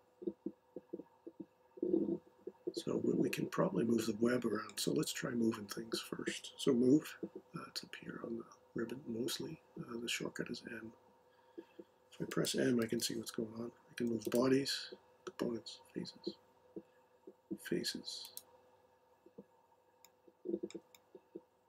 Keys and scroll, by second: 12.8 m.